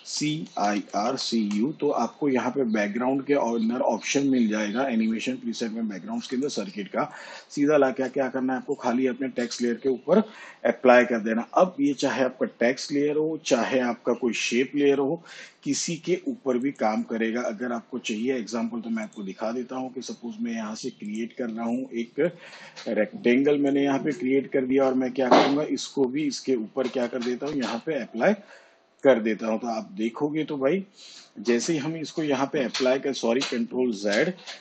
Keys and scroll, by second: 0.0-1.9 typing, 34.0 ctrl+z.